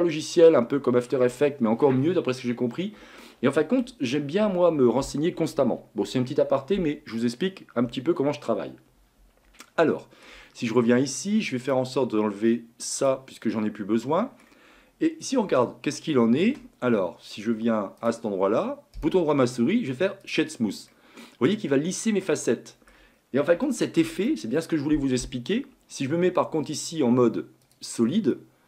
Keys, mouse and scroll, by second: 9.6-11.6 shift+middle drag, 11.6-13.4 drag, 13.4-15.5 middle drag, 15.5 space, 16.4 space, 18.0-18.9 drag, 18.9-20.9 right drag, 20.9-21.8 middle drag, 21.8-22.3 scroll up 4, 22.3-23.2 middle drag, 23.2-23.6 scroll down 2, 23.6-26.6 shift+middle drag, 27.6 click, 28.3-28.6 middle drag.